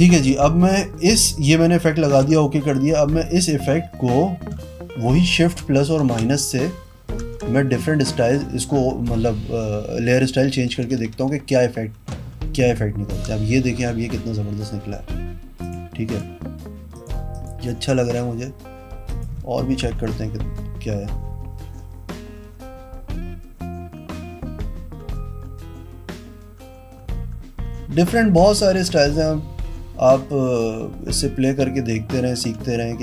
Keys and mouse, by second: 2.4 v, 2.9 click, 3.7 click, 6.4 Escape, 7.6-10.6 typing, 12.5 shift+-, 15.8 click, 16.3 click, 17.1 click, 17.5 click, 19.3 click, 27.6-33.0 typing.